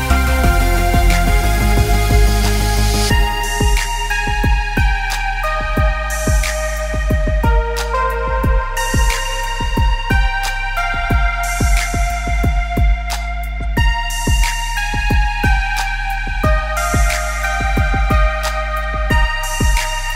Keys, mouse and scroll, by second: 0.2 middle click, 0.7-2.0 scroll up 7, 1.0 middle click, 1.7 middle click, 2.0-2.6 scroll down 6, 2.7 s, 3.9-4.3 scroll up 2, 4.6 click, 7.3-8.5 scroll down 4, 8.5 click, 8.5-9.0 scroll down 1, 9.4 click, 9.6 middle click, 10.5-11.1 scroll down 4, 10.8 middle click, 11.2 middle click, 12.8 middle click, 13.2-14.5 scroll up 2, 13.6 click, 14.7 click, 15.0 click, 15.3 middle click, 16.6 shift+a, 19.6 middle click.